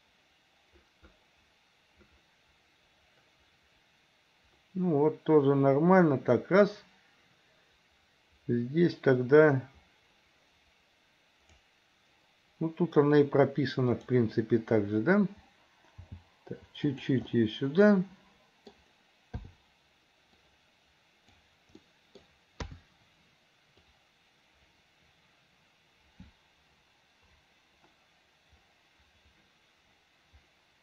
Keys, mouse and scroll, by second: 13.9 click, 16.0 g, 17.3-18.9 middle drag, 19.4 i, 20.5 click, 21.8 middle click, 22.7 KP_3, 23.9-30.8 drag.